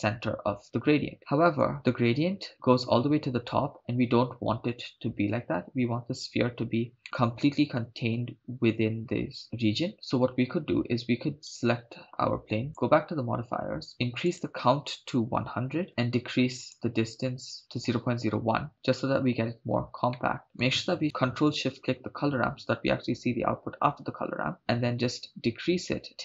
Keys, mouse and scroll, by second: 1.2-1.6 middle drag, 7.0-8.2 middle drag, 9.4 scroll up 3, 11.5 right click, 12.7 click, 14.3-15.9 drag, 15.8 0, 16.6 click, 20.2 middle click, 20.5 scroll down 6, 22.0 ctrl+shift+click, 24.6-26.2 drag.